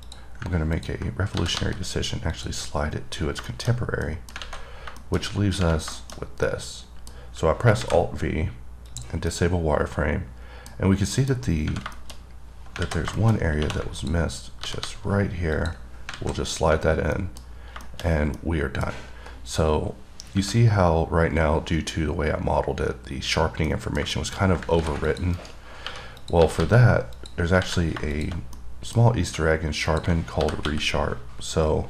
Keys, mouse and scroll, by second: 0.3 click, 1.0 click, 2.6 click, 3.4-4.3 scroll down 5, 3.7 middle click, 4.3 middle click, 5.3 middle click, 5.4 scroll down 3, 6.2 middle click, 6.4 scroll down 2, 6.7 middle click, 9.1 click, 9.6-11.0 middle drag, 11.0-11.4 scroll up 3, 11.4 middle click, 12.2 middle click, 12.4-13.0 scroll up 6, 13.4 middle click, 13.6 scroll up 1, 14.2 click, 15.8 click, 16.4-18.6 scroll down 14, 17.4 middle click, 18.1 middle click, 18.6 middle click, 19.2 scroll up 3, 20.3 scroll up 2, 23.9 middle click, 24.6 scroll up 2, 25.3 click, 25.6 right click, 26.5 click, 27.4 click, 28.4 click, 28.8 middle click, 29.4 scroll up 2, 30.1 click.